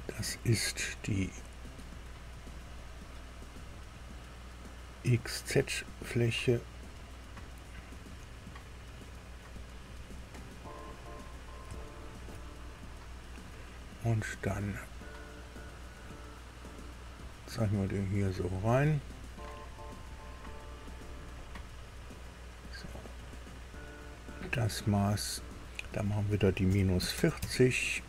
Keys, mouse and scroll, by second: 2.7 scroll down 1, 3.4 scroll up 1, 6.7 click, 8.8 click, 11.7 shift+middle click, 12.6-13.0 shift+scroll up 3, 15.8 click, 17.1 click, 18.5 click, 19.4-19.8 scroll up 2, 21.4 right click, 23.0 click, 24.1 click, 25.4 click, 26.6 KP_Subtract, 27.1 KP_4, 27.1 KP_0, 27.4 KP_Enter.